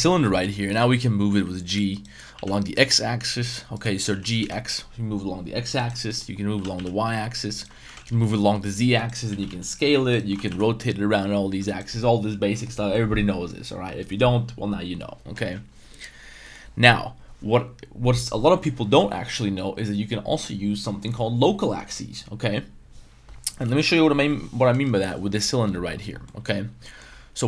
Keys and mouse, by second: 0.0-0.4 middle drag, 0.7 middle drag, 1.3 g, 1.9 right click, 2.3 g, 2.7 x, 4.0 g, 4.4 x, 5.8 right click, 6.1 middle click, 6.5 g, 6.7 y, 7.8 g, 8.1 z, 9.3 s, 9.4 z, 10.1 right click, 10.3 r, 10.5 y, 11.6 right click, 16.5 middle click, 23.7 middle click, 24.7 KP_Decimal, 26.2 middle drag, 26.8 middle click.